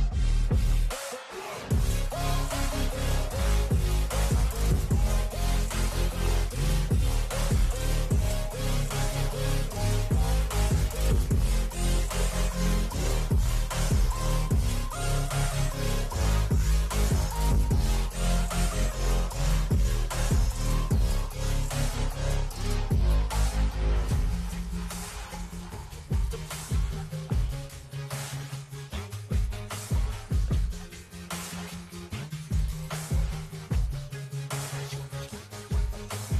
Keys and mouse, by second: 0.4 ctrl+v, 2.1 click, 2.6 v, 4.0 click, 6.0 ctrl+h, 6.8 Left, 7.4 Left, 7.8 Left, 8.0 Left, 9.0 Down, 9.6 Return, 10.5 ctrl+h, 22.8 ctrl+h, 24.0 Up, 24.3 Up, 24.6 Up, 25.2 Up, 25.4 Up, 26.0 Down, 27.2 Down, 28.7 click, 30.0 ctrl+h, 32.5-34.0 drag, 34.5 shift+Up, 34.7 shift+Up.